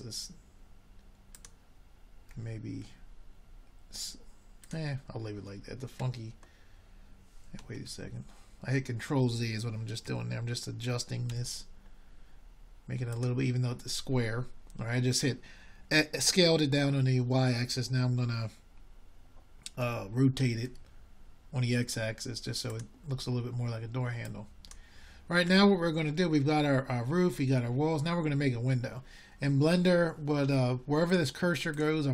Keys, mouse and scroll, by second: 0.8-2.8 middle drag, 7.2 r, 7.6-8.9 middle drag, 11.7-12.5 middle drag, 12.5 s, 16.8-18.1 middle drag, 18.1 ctrl+z, 20.5 s, 24.2-25.3 middle drag, 30.3 r.